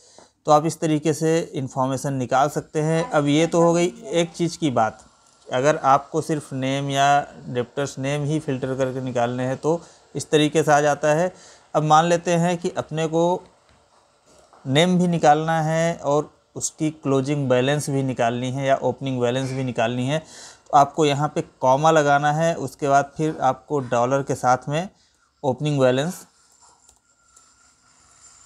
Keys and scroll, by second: 12.4 ctrl+n, 13.0 Up, 14.0 Right.